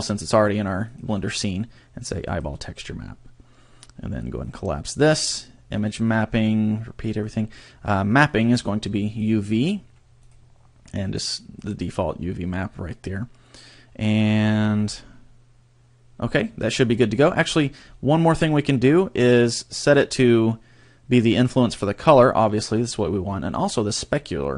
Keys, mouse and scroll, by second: 0.9 click, 4.4 click, 5.7 click, 6.2-7.2 scroll down 3, 7.2 click, 8.3 click, 10.2 click, 14.5-17.1 scroll up 8, 17.1-18.5 scroll down 12, 24.1 click.